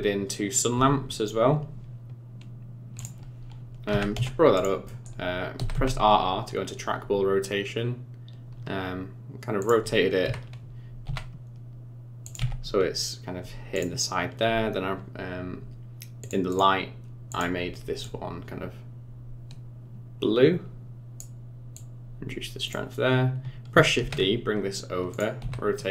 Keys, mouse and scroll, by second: 3.4-3.9 scroll down 3, 3.9 g, 4.8 middle click, 5.5 r, 10.2 KP_7, 11.0 r, 12.4 g, 16.2 click, 16.5 click, 17.3 click, 24.0 shift+d, 25.4 r.